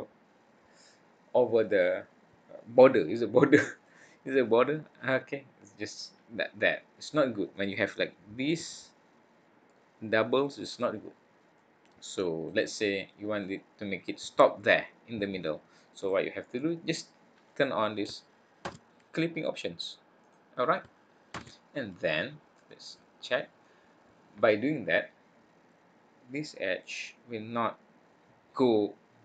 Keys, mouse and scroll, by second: 3.8 click, 7.5 middle click, 9.9-10.4 scroll up 1, 10.4 scroll down 1, 10.6-11.6 scroll down 3, 11.6 click, 13.4 click, 21.5 click, 22.5 middle click, 23.6 click.